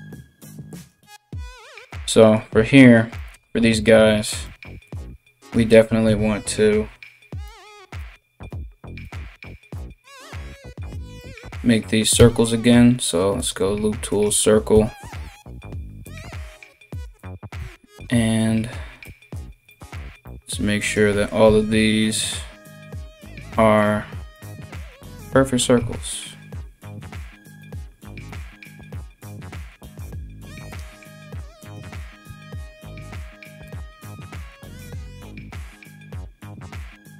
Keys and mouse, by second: 0.3 alt+right click, 1.5 right click, 5.0 alt+right click, 5.6 KP_3, 7.6 s, 10.1 right click, 10.5 alt+right click, 11.7 w, 13.7 right click, 13.8-16.5 middle drag, 14.3 w, 16.5 right click, 16.6-20.4 middle drag, 17.2 w, 20.4 alt+right click, 20.5-37.1 alt+middle drag, 21.0 w, 23.9 alt+right click, 24.8 alt+right click, 25.4 w, 27.9 alt+right click, 31.2 alt+right click, 31.8 w, 34.5 alt+right click, 35.1 w.